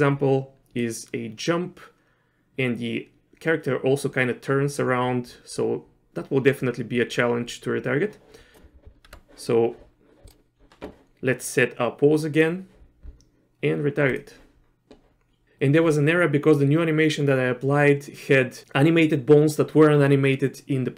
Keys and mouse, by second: 0.8-8.5 drag, 9.1 Tab, 12.3 click, 14.1-15.2 drag.